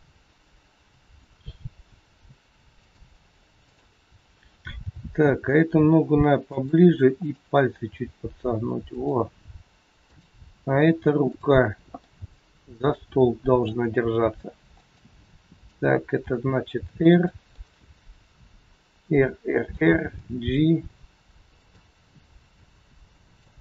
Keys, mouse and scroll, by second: 3.2 r, 3.7 click, 4.8 g, 7.2 click, 7.8 g, 9.9 click, 11.2 click, 11.9 middle click, 14.2 g, 15.2 middle click, 16.1 r, 17.6 middle click, 20.1 g, 22.3 middle click, 23.4 g.